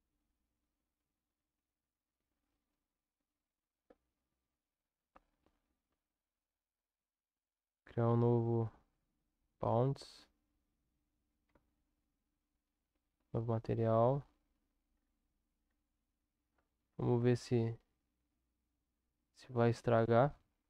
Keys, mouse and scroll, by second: 5.9 u, 11.4 Tab, 13.0 click.